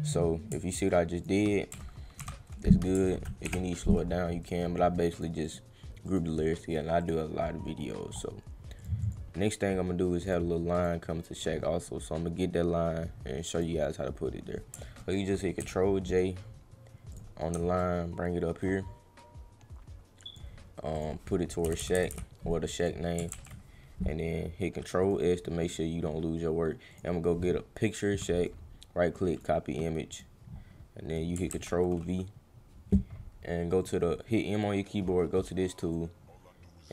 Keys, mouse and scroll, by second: 1.1 click, 4.4 click, 5.1 click, 5.4 click, 6.1 click, 7.0 click, 8.8 click, 9.0 click, 10.2 click, 10.7 click, 11.5 scroll up 1, 13.5 click, 17.1 click, 17.8-20.4 shift+drag, 20.9 click, 22.8 click, 23.3 ctrl+s, 25.0 click, 25.6 click, 26.9 click, 28.3 right click, 29.3 click, 30.1 click, 31.1 click, 31.5 ctrl+v, 35.9-36.9 drag.